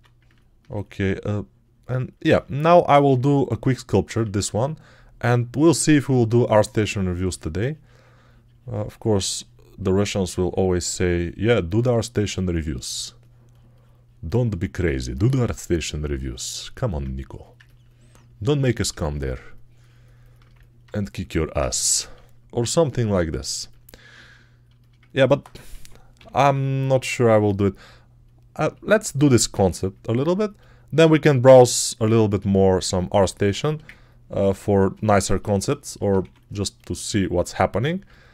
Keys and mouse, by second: 4.1 1, 16.0 right click, 16.8 right click, 17.7-18.8 right drag, 20.3 right click, 20.7 right click, 25.6-26.8 typing, 36.1 2, 37.9 alt+shift+right click.